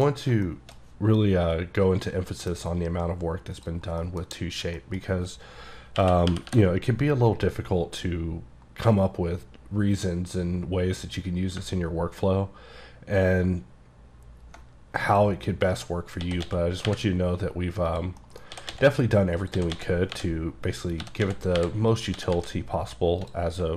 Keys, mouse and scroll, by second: 0.5 shift+middle click, 0.8-1.2 scroll down 2, 1.2-2.8 middle drag, 3.6 click, 4.0 KP_Decimal, 4.7 scroll down 1, 4.8 middle click, 6.0-6.5 typing, 11.8-13.7 ctrl+scroll down 6, 13.7-14.7 ctrl+scroll down 4, 15.1 click, 15.6-16.3 scroll down 2, 16.3 s, 16.5 x, 16.9 y, 18.0 click, 18.3 middle click, 18.6-22.4 typing, 19.4 click, 20.7 click, 22.0 click, 23.3 click.